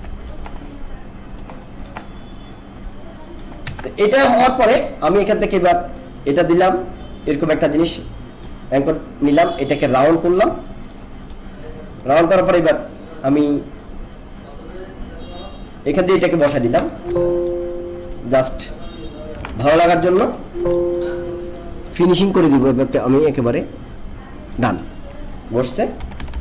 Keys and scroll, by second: 3.6 ctrl+z, 16.8 alt+space, 19.4 ctrl+=, 20.3 alt+space, 26.0 ctrl+-.